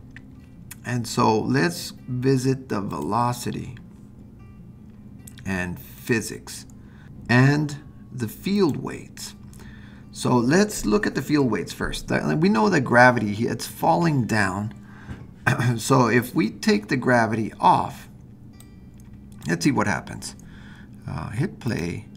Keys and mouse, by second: 3.0-4.3 drag, 6.0 click, 8.5 click, 18.7 click, 21.7 click.